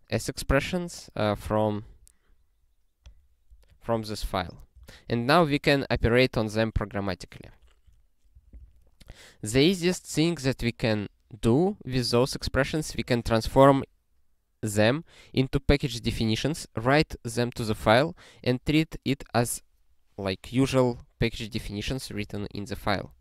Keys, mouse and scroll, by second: 1.5 click, 1.7 double click, 3.0 click, 3.9 ctrl+n, 4.7 ctrl+space, 5.1 ctrl+n, 8.3 ctrl+w, 8.7 ctrl+s.